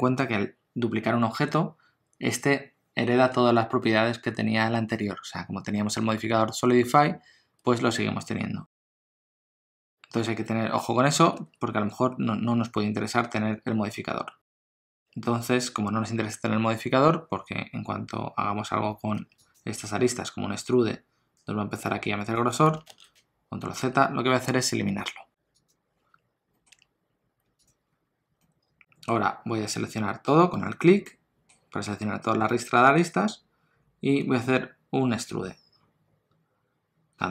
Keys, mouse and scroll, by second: 8.8 scroll down 1, 8.9 middle click, 11.3 Tab, 13.1 2, 14.5 alt+click, 14.7 middle click, 15.0 ctrl+z, 15.0 Tab, 15.0 middle click, 15.0 e, 18.7 Tab, 19.2 2, 19.5 click, 20.6 e, 22.9 ctrl+z, 23.8 Tab, 25.6 click, 26.5 Tab, 26.5 middle click, 26.7 Tab, 27.6 alt+click, 28.4 middle click, 35.3 e.